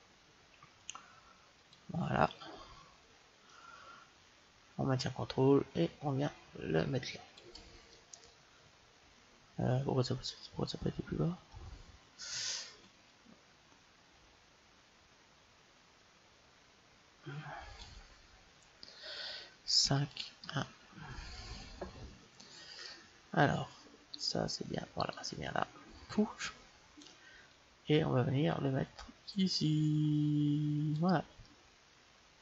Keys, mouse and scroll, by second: 2.1-5.2 middle drag, 5.2-6.9 drag, 7.7-9.6 middle drag, 13.3-14.9 drag, 19.6 KP_5, 20.3 KP_1, 24.0-26.8 right drag, 25.3-27.7 middle drag, 27.7-29.3 drag, 31.2-32.4 middle drag.